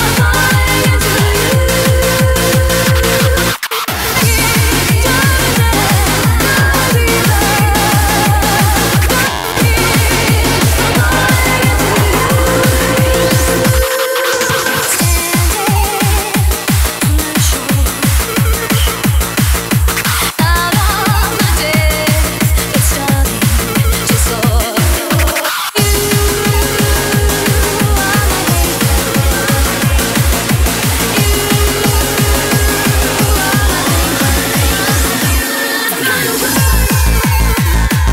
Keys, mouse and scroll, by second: 11.1-13.0 drag, 17.4-18.6 drag.